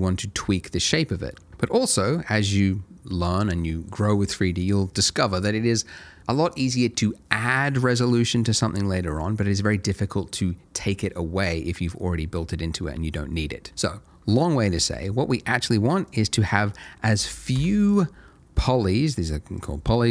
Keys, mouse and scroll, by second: 16.1 click, 17.1 3, 17.2 2, 17.5 Return, 19.6 click.